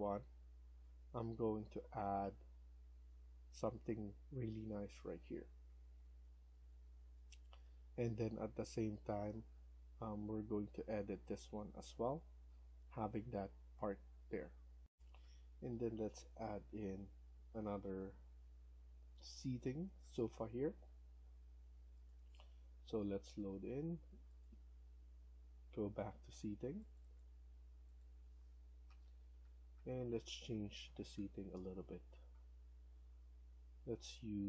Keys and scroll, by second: 0.0 Escape, 14.7 F1, 28.8 Down, 29.1 Down, 29.3 Down, 29.6 Down, 29.8 Down, 30.3 Down, 30.5 Down, 30.7 Down, 31.0 Down, 31.3 Down, 31.6 Down, 32.0 Down, 33.0 Down.